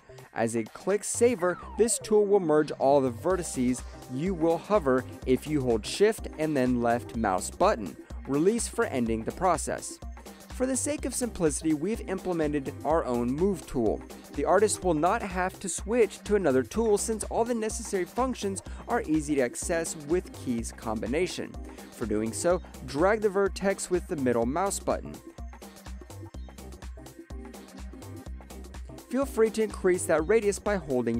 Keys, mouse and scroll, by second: 0.3 middle click, 4.2 alt+click, 4.4 alt+right click, 4.7 alt+middle click, 5.4 shift+click, 8.5 alt+middle click, 9.0 shift+click, 12.5 alt+middle click, 13.0 shift+click, 13.1 alt+middle click, 16.5 alt+click, 16.9 shift+middle click, 17.9 alt+middle click, 19.4 middle click, 22.0 middle click.